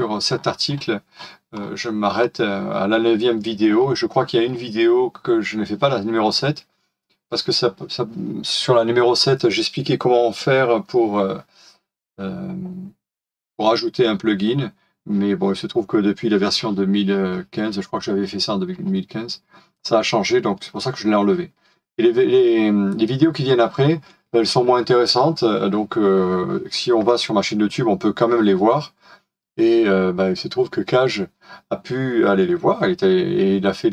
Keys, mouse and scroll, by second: 2.1 scroll down 1, 2.2-2.7 scroll up 1, 18.6-19.3 scroll down 1.